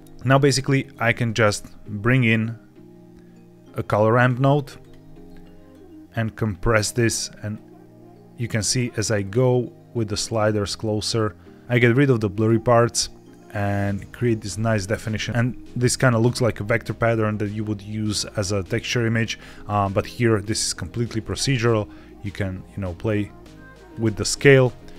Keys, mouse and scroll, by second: 0.0 middle click, 0.9 shift+a, 5.6-6.8 drag, 7.4-8.7 drag, 9.1-12.4 drag, 12.7-14.3 drag, 14.6 scroll up 1, 14.7-15.3 scroll down 1, 15.7-18.7 scroll up 1, 21.5-23.9 shift+drag, 24.8-24.9 shift+drag.